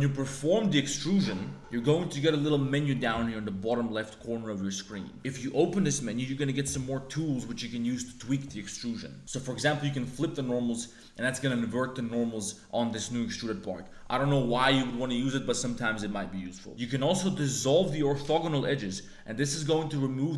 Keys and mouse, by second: 5.1 e, 10.0 click, 10.7 click, 12.5 middle click, 17.3 click, 18.7 middle click, 19.6 middle click.